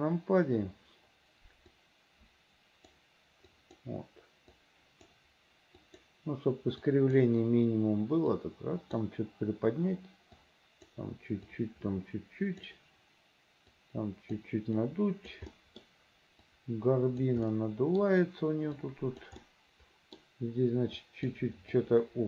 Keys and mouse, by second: 1.9-3.1 drag, 3.7 click, 4.7 click, 5.9 click, 6.9 click, 8.5 click, 10.5 click, 11.6-12.8 drag, 13.8 click, 14.9 click, 15.7 middle click, 16.6 click, 17.6 middle click, 18.9 right click, 19.5 middle click, 21.1 right click, 21.8 right click.